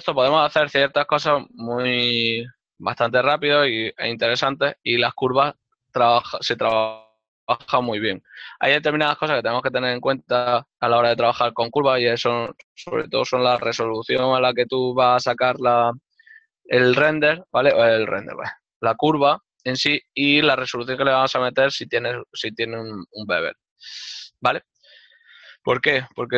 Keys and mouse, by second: 4.1 click, 8.8-9.5 typing, 14.5 shift+middle click, 24.1 middle click, 25.9 ctrl+middle click.